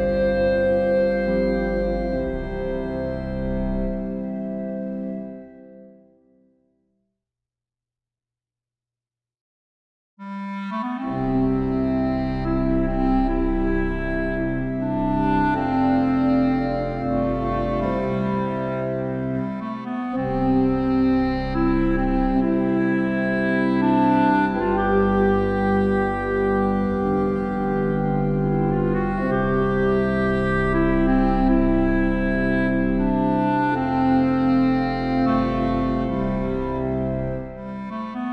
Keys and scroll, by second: 26.9 ctrl+e.